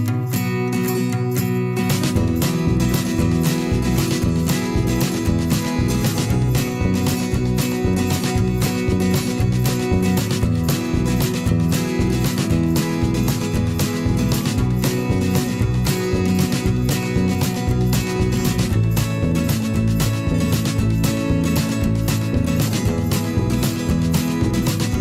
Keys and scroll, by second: 5.1 p, 8.9 v, 9.2 /, 17.3 p, 22.1 v, 22.5 /.